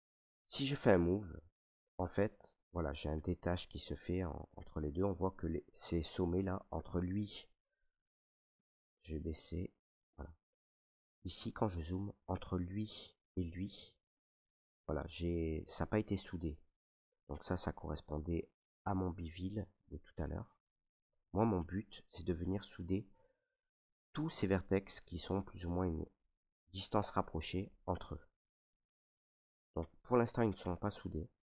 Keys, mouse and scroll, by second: 2.2 right click, 4.0 ctrl+z, 5.4 ctrl+right click, 7.7 s, 9.9 click, 9.9 s, 11.2 ctrl+right click, 18.0 ctrl+right click, 22.2 right click, 25.7 ctrl+right click, 28.7 s, 30.7 click.